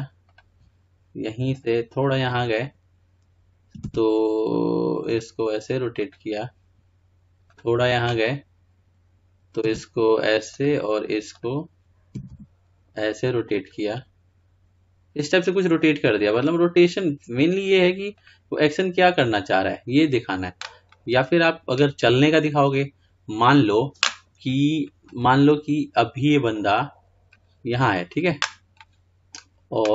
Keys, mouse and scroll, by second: 0.5 r, 1.8-6.2 drag, 6.2 r, 7.9-10.6 drag, 10.6 r, 11.8 click, 13.4 r, 16.4-22.5 drag, 22.5-25.9 middle drag, 25.9-26.8 scroll down 4, 26.8-29.9 drag.